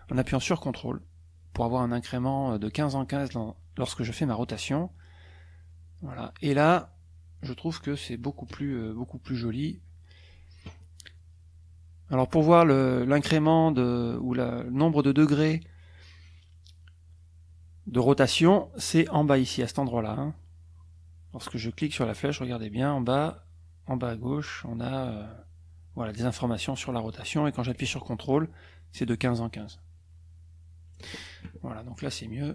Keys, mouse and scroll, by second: 12.1-18.7 drag, 22.5-31.1 drag.